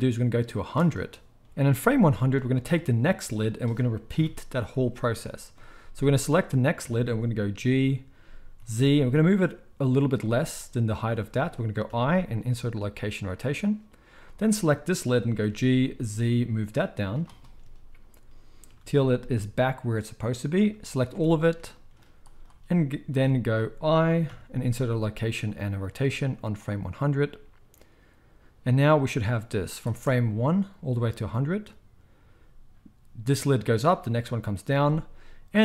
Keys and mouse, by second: 2.6-3.5 middle drag, 3.5 click, 3.5-10.6 middle drag, 4.1 KP_1, 4.6 z, 7.5 g, 11.9 i, 14.2-18.4 middle drag, 15.4 g, 18.7-22.4 middle drag, 18.7 g, 21.1 a, 22.4-35.6 drag, 23.1 z, 24.3 i, 29.9 space, 34.6 space.